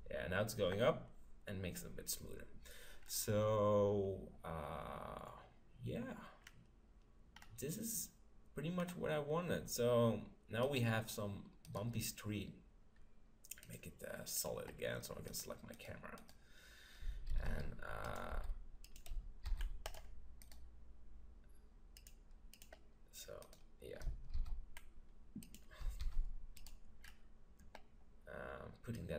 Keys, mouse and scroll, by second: 3.1-4.8 middle drag, 6.4-9.5 middle drag, 9.5-10.6 scroll up 1, 10.6 scroll up 1, 10.7-13.5 right drag, 13.6-15.3 drag, 15.3 middle click, 15.5-17.3 right drag, 17.3 middle click, 17.6 shift+f, 18.2-21.7 drag, 18.3 g, 19.5 shift+f, 20.4-22.3 right drag, 22.0-23.6 drag, 23.5-25.4 right drag, 24.4 shift+f, 25.7-28.8 drag, 26.1 shift+f, 27.1-28.6 middle drag, 29.0 click.